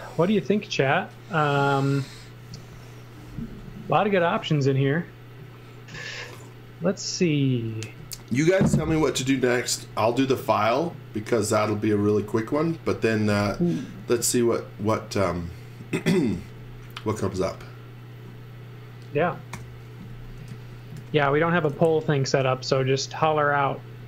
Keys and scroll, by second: 11.9 x, 12.5 v, 16.3 z, 17.4 z, 19.5-22.2 typing.